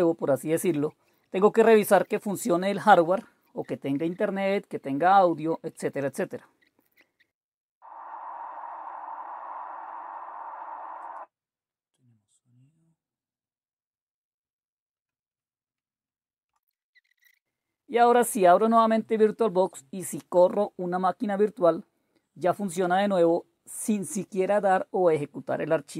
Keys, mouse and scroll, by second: 0.2 super+Return, 0.2 super+Return, 0.4 super+e, 0.6 super+r, 0.6 Down, 0.6 Up, 0.8 super+r, 0.8-4.1 typing, 5.0 super+h, 5.1 super+d, 5.2 Return, 5.2-7.6 typing, 5.5 super+w, 10.9 click, 16.6 super+q, 17.2 super+d, 17.3 typing, 17.3 Return, 18.8 click, 19.5 right click, 19.7-20.7 right drag.